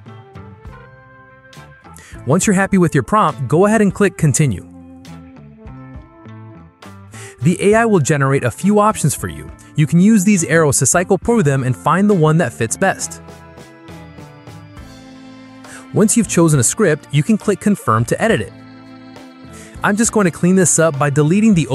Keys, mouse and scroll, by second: 0.0-0.9 typing, 3.8 click, 12.3-13.3 drag, 13.8 click, 15.6 click, 18.2 click, 20.1 click, 21.5 BackSpace.